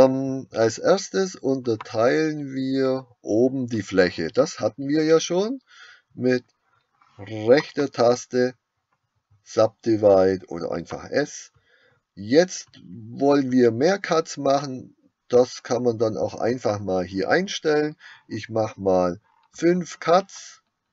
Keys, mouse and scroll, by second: 10.9 right click.